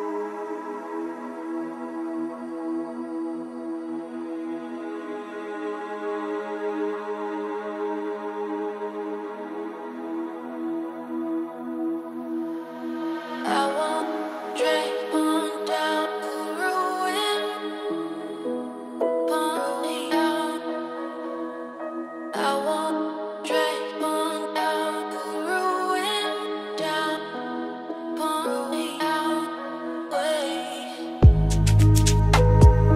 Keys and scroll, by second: 3.5 ctrl+x, 5.4 ctrl+z, 11.6 ctrl+g, 16.2 ctrl+space.